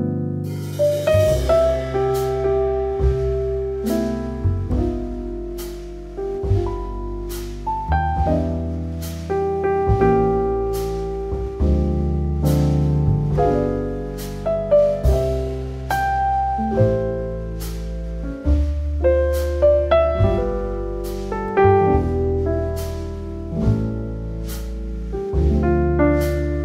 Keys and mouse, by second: 1.5 KP_1, 1.8 e, 2.9 g, 3.2 z, 4.5 e, 6.2 g, 6.2 alt+middle click, 7.4 Tab, 7.7 Tab, 8.3 Tab, 8.6 click, 8.7 click, 9.6 KP_1, 10.2 e, 12.8 click, 13.6 ctrl+z, 14.1 g, 14.3 z, 15.6 click, 16.1 alt+middle click, 16.9 ctrl+z, 17.7 Tab, 18.5 Tab, 19.1 KP_1, 19.7 e, 20.7 z, 22.7 click, 23.1 s, 24.7 click, 25.1 g, 25.2 z.